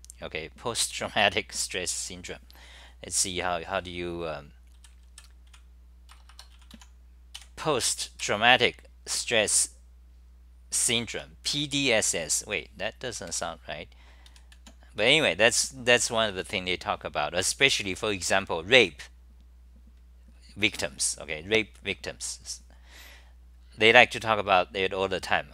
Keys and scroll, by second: 5.9-6.6 typing, 14.4-15.1 typing.